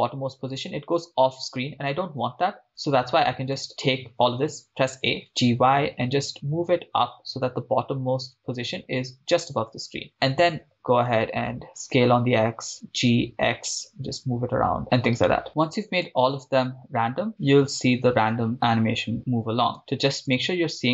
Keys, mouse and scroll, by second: 2.8-4.0 drag, 4.1 a, 5.2 g, 6.0 y, 9.9 click, 11.7 s, 11.8 x, 12.7 click, 13.3 g, 13.3 x, 14.8 click, 15.4 right click, 16.3 shift+space, 19.8 shift+space, 20.3-20.7 drag.